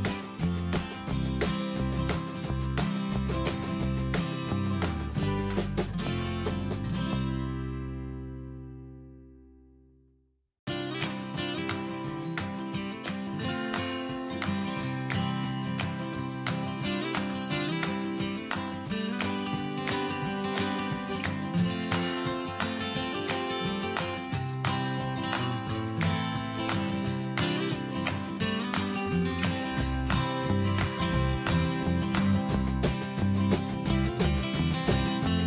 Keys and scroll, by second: 3.6 alt+Tab, 5.8 ctrl+c, 7.0 ctrl+v, 8.2 Escape, 13.9 Right, 19.0 ctrl+z, 19.9 ctrl+shift+z.